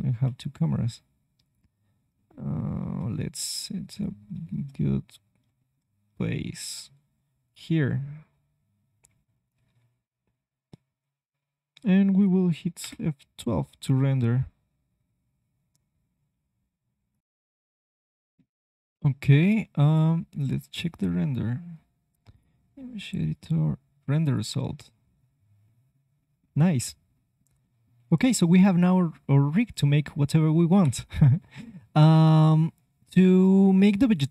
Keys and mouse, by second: 0.2 Delete, 1.3 click, 3.3-9.0 middle drag, 9.0-10.2 drag, 12.1-17.2 drag, 20.6-22.6 drag, 24.8-30.8 middle drag, 30.6 KP_1, 32.0 KP_3, 33.0-34.3 middle drag.